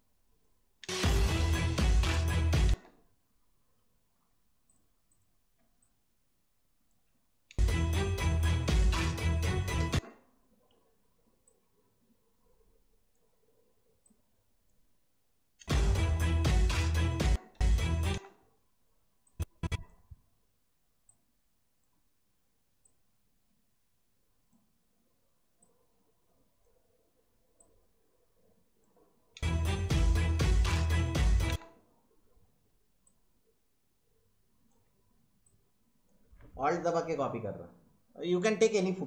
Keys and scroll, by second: 0.8 space, 2.6 space, 7.5 space, 9.9 space, 15.6 space, 17.2 space, 29.3 space, 31.5 space.